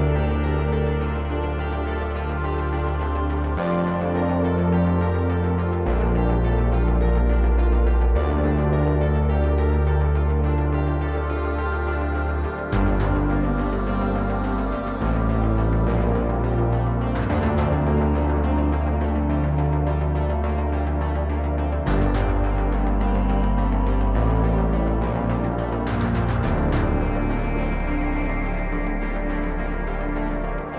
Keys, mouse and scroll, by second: 1.5 click, 2.1 shift+a, 4.8-6.2 drag, 7.2 shift+a, 9.8 click, 11.7 click, 12.5 click, 13.1 click, 15.9 click, 16.8-17.9 drag, 20.4 click, 20.6 click, 25.6-28.3 drag, 29.3 click, 30.1 click.